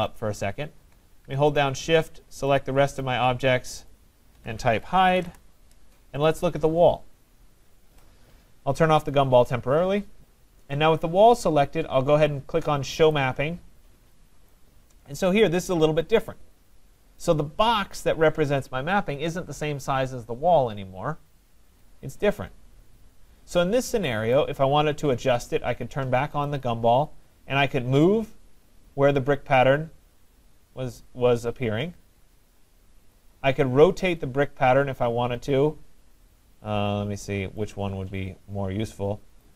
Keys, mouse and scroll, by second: 0.2 click, 1.6 shift+click, 2.6 shift+click, 3.1 shift+click, 3.9 shift+click, 5.2 typing, 5.2 Return, 10.5 middle click, 13.2 click, 13.7 middle click, 13.8 middle click, 14.5 right click, 14.9 middle click, 15.0 middle click, 15.1 middle click, 17.2 right click, 24.4 right click, 26.5 click, 33.1 click, 39.4 click.